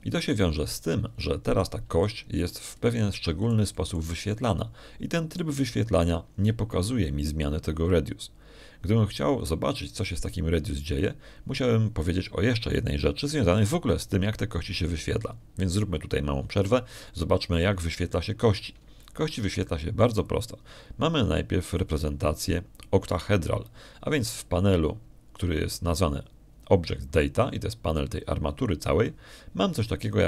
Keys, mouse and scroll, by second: 1.5 Escape, 3.4 middle click, 3.9 shift+click, 4.7 shift+click, 20.1 middle click, 20.9-22.1 ctrl+drag, 23.2-24.5 drag, 24.9 middle click, 25.9 middle click, 25.9-26.5 scroll up 1, 26.7 middle click, 26.7 scroll up 1.